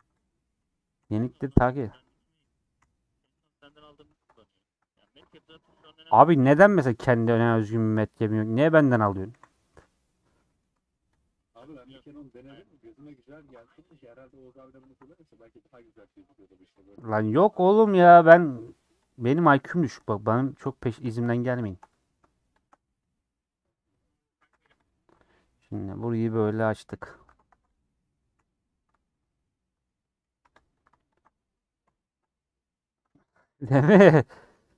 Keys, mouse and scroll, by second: 0.0-2.7 typing, 1.5 Tab, 2.1 Left, 3.9 /, 4.2 middle click, 4.7 Tab, 5.5-7.1 middle drag, 7.1 c, 9.3 ;, 9.7 middle click, 10.6 scroll down 1, 10.7 3, 11.1 click, 11.4-12.7 middle drag, 12.7 ctrl+Left, 13.4 ctrl+Left, 13.6-14.8 middle drag, 14.8 ctrl+Left, 15.0-16.8 middle drag, 16.8 ctrl+Left, 17.6 ;, 18.2 middle click, 18.6 2, 19.0 click, 19.4 click, 19.7 middle click, 20.5 shift+click, 20.7 middle click, 21.7 shift+click, 21.9 middle click, 22.6 shift+click, 23.0 middle click, 23.4-23.8 scroll up 2, 23.8 middle click, 24.3 a, 24.8 u, 25.1-26.8 middle drag, 26.8 /, 27.2 Tab, 27.4 h, 27.7 click, 28.3 /, 28.5 middle click, 28.9 Tab, 29.1-30.4 middle drag, 30.4 3, 30.5 click, 31.8 ;, 32.1-33.8 middle drag, 33.8 click, 34.4 c, 34.6 3.